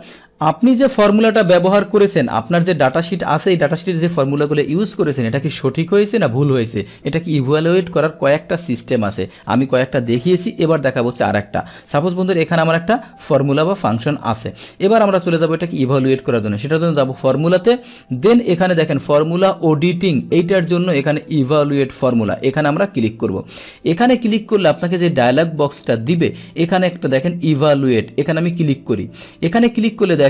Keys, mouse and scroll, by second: 0.0 click, 2.9 click, 12.0 click, 16.8 click, 22.0 click, 23.3-24.6 drag.